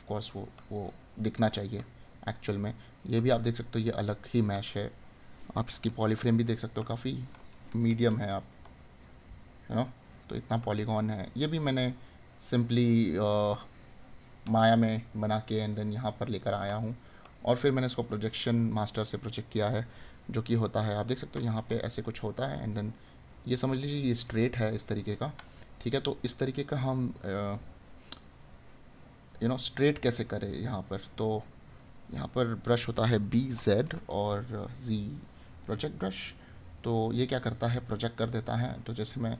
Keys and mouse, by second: 6.7 right click, 8.9 right click, 10.4 right click, 14.2 right click, 20.7 right click, 24.5 right click, 30.2 right click.